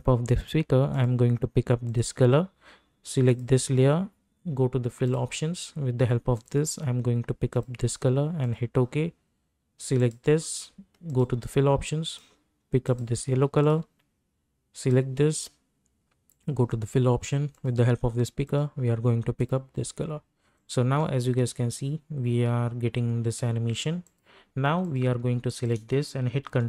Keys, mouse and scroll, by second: 21.5 space, 24.0 click, 24.8 click, 25.5 shift+click, 26.4 ctrl+d.